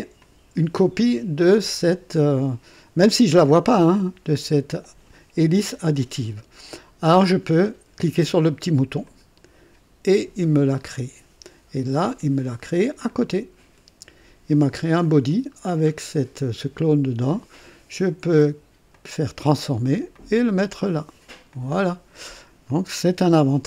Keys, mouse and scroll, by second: 0.1 click, 1.2 scroll down 2, 3.8 click, 9.0 click, 13.0 click, 14.9 click, 15.5-15.8 scroll down 1, 17.4 click, 18.0 right click, 18.9 click, 20.1-21.2 drag, 21.5 click, 22.2-23.6 drag.